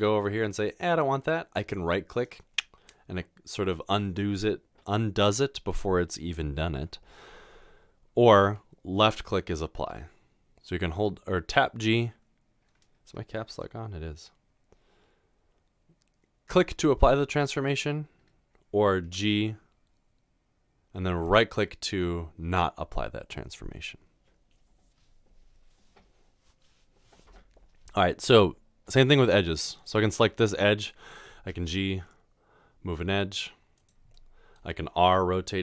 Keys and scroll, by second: 8.5 g, 19.1 typing, 28.9 2, 31.5 typing.